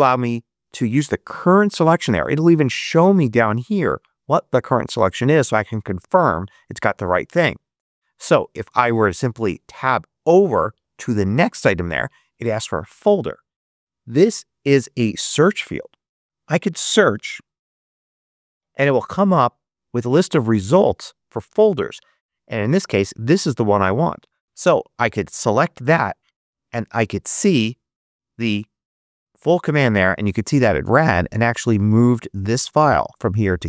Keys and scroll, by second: 10.1 Tab, 16.9-18.2 typing, 24.4 Up, 24.6 Return.